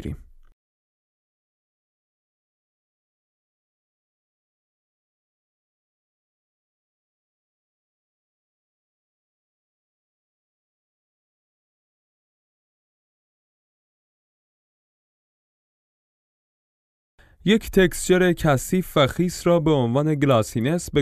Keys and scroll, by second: 1.2 alt+Tab, 7.0 alt+Tab, 12.5 F11.